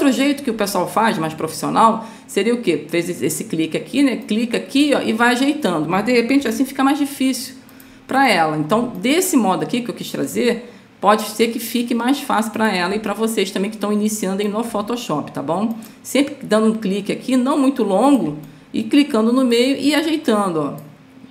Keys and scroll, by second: 7.1 ctrl+z.